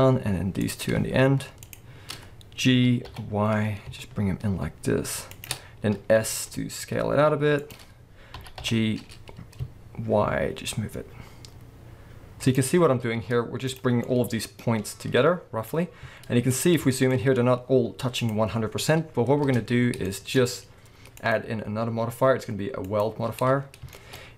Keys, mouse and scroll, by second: 0.6 click, 1.6 shift+click, 2.7 g, 5.4 shift+click, 5.6-6.3 scroll down 1, 6.3 s, 7.7 click, 8.4 g, 12.6 shift+click, 12.8-13.1 scroll down 1, 13.1 z, 14.0-18.1 middle drag, 15.7 scroll up 2, 16.0 z, 17.1-17.4 scroll up 1, 18.1 click, 18.8 scroll down 1, 19.4 Tab, 19.8 scroll down 1, 20.1-21.2 shift+middle drag, 21.2-23.9 drag, 23.5-24.3 scroll up 3, 23.9-24.3 shift+middle drag.